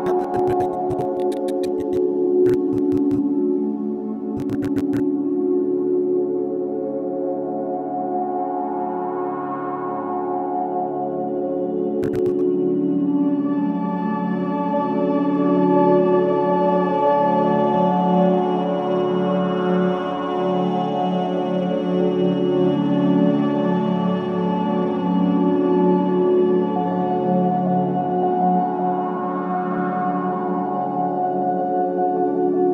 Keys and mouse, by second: 4.9 click, 6.4-9.6 alt+drag, 12.0-14.4 drag, 16.1 click, 17.9 g, 18.2 x, 19.7 Escape, 21.1 typing, 21.4-24.1 alt+drag, 24.3-25.6 typing, 24.7 click, 27.0-31.7 drag, 31.4-32.1 typing, 32.6 click.